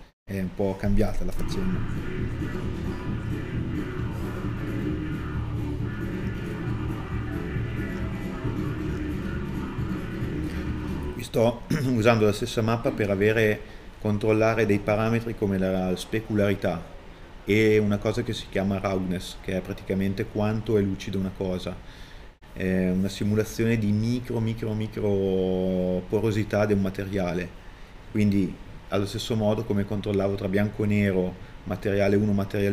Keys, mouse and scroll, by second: 3.4 middle click, 4.4 click, 5.1 middle click, 7.9 click, 8.9 scroll down 1, 9.0 scroll up 1, 9.2 middle click.